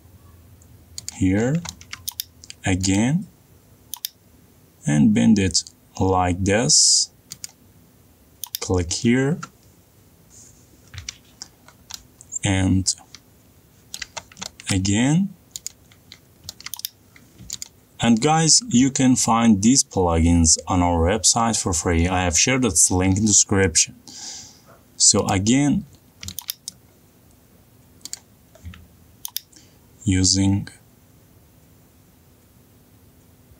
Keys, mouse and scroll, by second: 2.2 click, 2.5 middle click, 3.2 middle click, 4.1 click, 8.6 click, 12.9 middle click, 13.7 middle click, 15.1 middle click, 15.4 middle click, 15.6 middle click, 15.9 middle click, 16.9 click, 17.4 middle click, 17.5 middle click, 17.9 click, 26.5 click, 27.1 middle click, 27.1 middle click, 27.2 middle click, 27.4 middle click, 27.9 middle click, 28.1 middle click, 29.1 middle click, 29.3 click, 29.3 middle click, 29.7 click, 29.8 middle click.